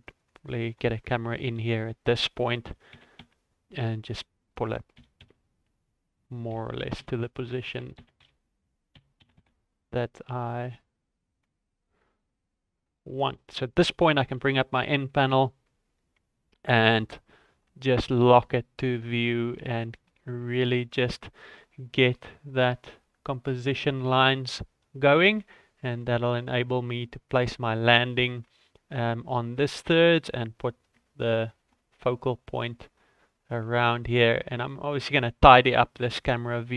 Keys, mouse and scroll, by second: 0.2 right click, 0.6 click, 1.0 shift+a, 2.7 g, 4.9 g, 6.5 g, 8.9 g, 15.2 ctrl+KP_0, 16.6 n, 17.5 click, 17.9 middle click, 18.5 shift+middle click, 19.3 ctrl+middle click, 19.9 middle click, 20.4 shift+middle click, 22.4-23.0 scroll down 1, 23.2-23.9 scroll down 2, 23.9 click, 25.4 ctrl+middle click, 26.3 shift+middle click, 28.3 middle click, 29.9 middle click, 31.0 ctrl+middle click, 31.5 shift+middle click, 31.8 scroll up 1, 32.4 middle click, 32.8 shift+middle click, 34.1 middle click, 34.9 shift+middle click, 35.5 middle click, 36.1 ctrl+middle click.